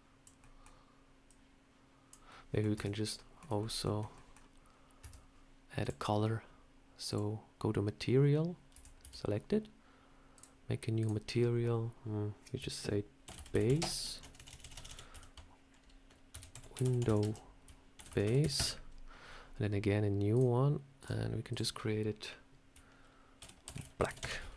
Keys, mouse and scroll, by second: 0.3 middle click, 1.1 click, 2.2 middle click, 2.6 Tab, 2.9 scroll up 1, 3.0 middle click, 3.5 shift+middle click, 4.0 middle click, 4.9 Tab, 5.7 click, 7.0 click, 8.6 Tab, 8.9 a, 10.2 click, 10.9 click, 14.2 BackSpace, 14.4 BackSpace, 14.7 BackSpace, 20.2 click, 20.9 click, 24.4 click.